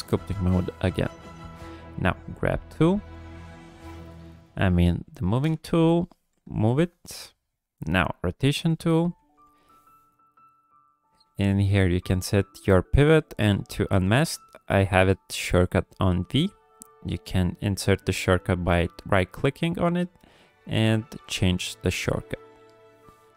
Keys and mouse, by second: 0.3 shift+click, 1.5 click, 3.5-4.6 drag, 5.7 KP_3, 6.5 shift+click, 9.2 v, 10.6-23.1 drag.